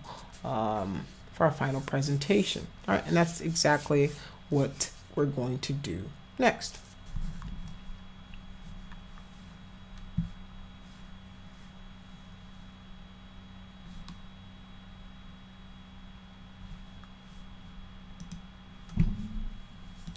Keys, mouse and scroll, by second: 18.2 click.